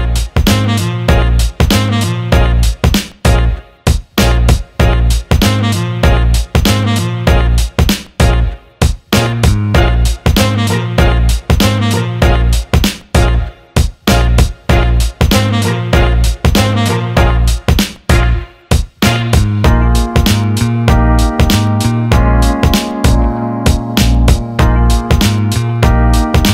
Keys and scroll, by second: 7.4 Up.